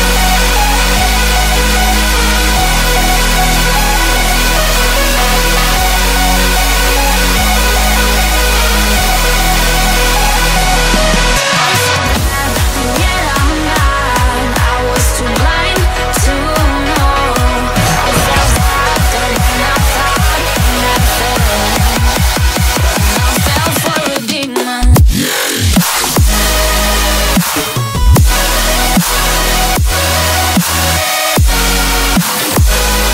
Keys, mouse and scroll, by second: 5.6 middle click, 10.4 ctrl+z, 11.7 scroll up 2, 12.6 shift+middle click, 18.0 ctrl+z, 19.6 scroll up 1, 20.5 scroll up 2, 20.6 shift+middle click, 25.6 middle click, 30.9 middle click, 31.3 scroll down 3, 31.7 middle click.